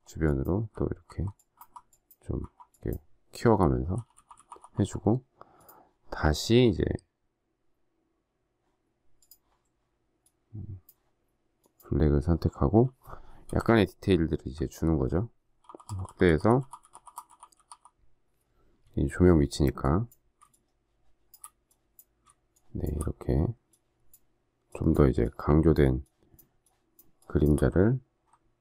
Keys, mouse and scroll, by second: 0.0-2.3 typing, 13.6 alt+scroll up 1, 15.6-16.0 typing, 20.5 shift+click, 25.1 shift+click, 26.0 shift+click, 26.6 shift+click, 27.1 shift+click, 27.7 alt+scroll down 1.